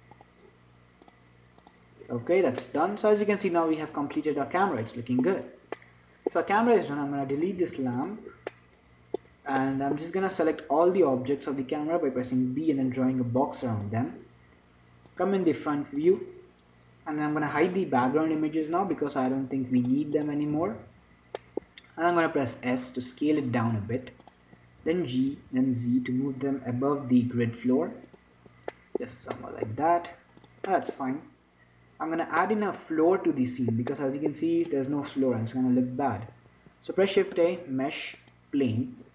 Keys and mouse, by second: 1.3 middle click, 5.7-7.8 middle drag, 7.6 click, 7.8 right click, 7.8 x, 8.3-9.6 drag, 9.6-12.5 middle drag, 10.8 z, 12.5 b, 16.4-17.8 drag, 17.8 n, 20.1-22.8 drag, 20.8 n, 22.8 s, 25.1 g, 29.0-37.4 middle drag, 29.4 z, 30.4 s, 37.4 shift+a.